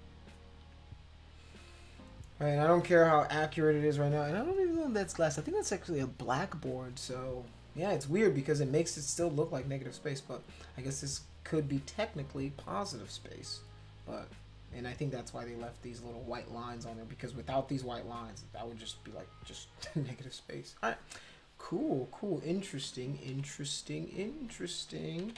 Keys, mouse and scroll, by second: 0.3 shift+click, 23.3 [, 25.2 [.